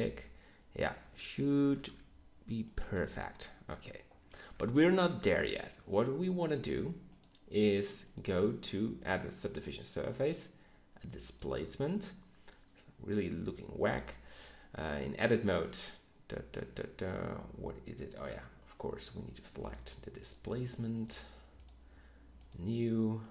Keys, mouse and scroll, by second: 1.0 Tab, 1.6 g, 2.9 Tab, 3.8 middle drag, 14.8 Tab, 17.9 Tab, 22.5-23.3 right drag.